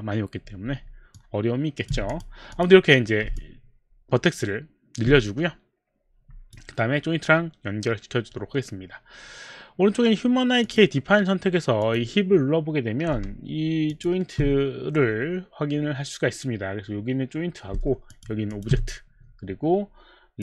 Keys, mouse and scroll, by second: 1.1 alt+click, 2.1 click, 2.5 click, 3.2 click, 3.4 alt+click, 10.6 click, 11.8 click, 13.9 shift+click, 18.1 shift+click, 18.5 shift+click.